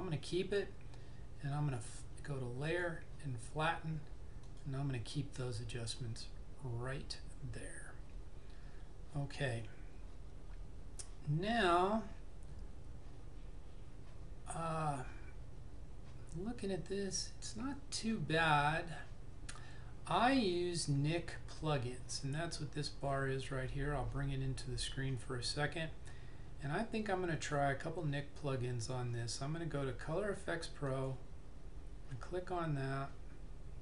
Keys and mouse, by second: 2.7 click, 21.7 click, 31.0 click.